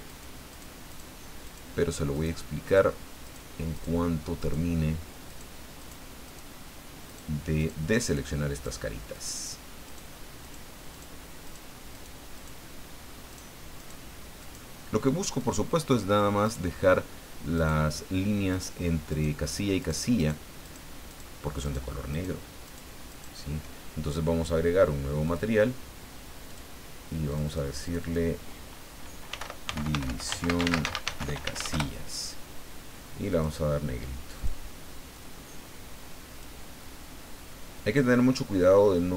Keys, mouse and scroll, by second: 0.1 shift+right click, 0.5 shift+right click, 0.9 shift+right click, 1.4 shift+right click, 2.1 shift+right click, 2.6 shift+right click, 3.2 shift+right click, 3.7 shift+right click, 4.4 shift+right click, 5.3 shift+right click, 5.8 shift+right click, 6.2 shift+right click, 7.1 shift+right click, 7.6 shift+right click, 8.0 shift+right click, 8.5 shift+right click, 9.1 shift+right click, 9.9 shift+right click, 10.4 shift+right click, 10.9 shift+right click, 11.4 shift+right click, 11.9 shift+right click, 12.3 shift+right click, 13.3 shift+right click, 13.8 shift+right click, 14.4 shift+right click, 15.4 shift+right click, 16.4 shift+right click, 17.5 shift+right click, 18.5 shift+right click, 19.1 shift+right click, 19.8 shift+right click, 20.2 shift+right click, 20.6 shift+right click, 21.1 shift+right click, 21.6 shift+right click, 22.1 shift+right click, 22.6 shift+right click, 23.1 shift+right click, 25.2 click, 26.5 click, 27.3 click, 27.8 click, 29.3-31.5 typing, 31.7 Return, 33.3 click, 34.4 click, 35.1-36.6 drag, 37.2-37.7 scroll up 2, 38.2-38.7 scroll up 2.